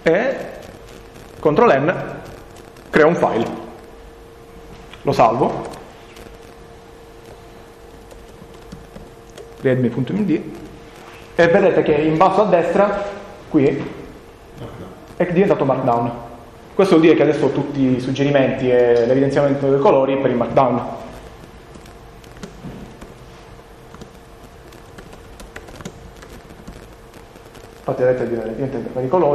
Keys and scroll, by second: 2.4 ctrl+n, 6.4 ctrl+s, 23.5-26.1 typing.